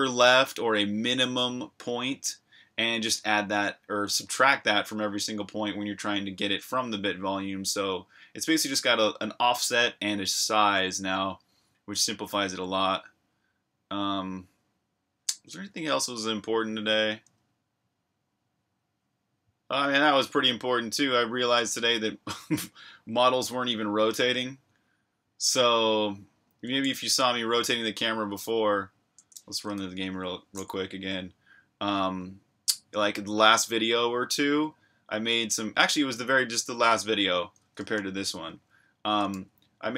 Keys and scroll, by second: 26.9 super+Tab, 29.7 super+r, 29.7-31.1 typing, 38.3 v, 39.4-39.9 typing.